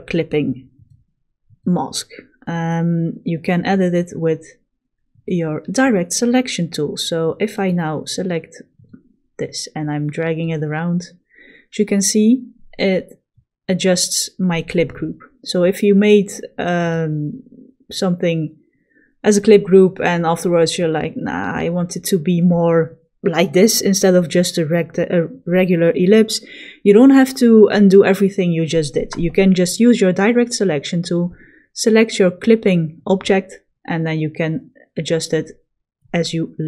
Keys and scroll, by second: 4.7 a.